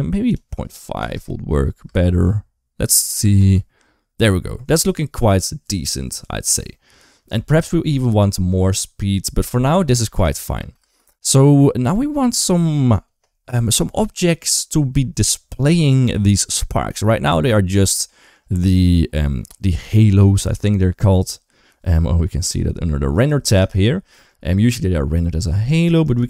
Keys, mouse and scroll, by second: 0.1 click, 1.7 space, 2.8 click, 3.0 space, 9.9 space, 10.4 space, 10.6 space, 17.8 shift+middle click, 19.3 middle click, 23.0 click, 23.6-24.0 shift+middle drag, 26.0-26.2 drag.